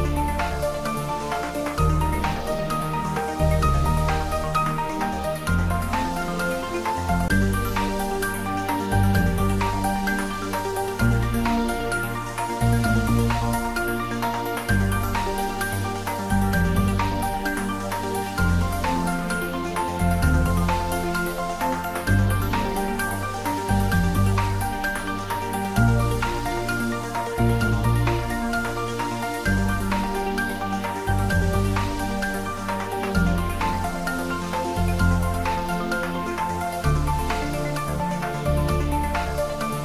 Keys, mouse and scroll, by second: 0.4-2.0 scroll up 1, 3.0 click, 7.0 click, 16.4-17.0 scroll down 1, 17.0-17.4 scroll up 1, 18.8 click, 19.4-21.0 scroll up 1, 21.0-21.4 scroll down 1, 21.6-23.1 middle drag, 23.1 shift+a, 25.9 click, 27.6 scroll down 1, 30.0-34.2 scroll up 1, 35.5-37.3 drag, 37.3 scroll up 1, 38.3-39.6 scroll down 1.